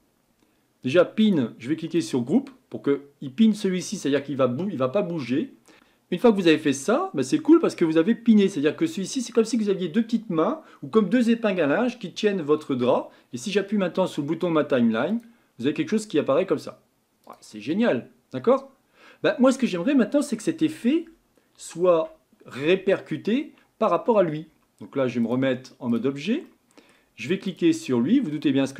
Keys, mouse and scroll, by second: 1.2-17.7 drag, 17.7-20.7 middle drag, 21.9 Tab, 22.6 Tab, 25.2-26.5 drag, 26.5-27.5 middle drag, 27.5-28.7 drag.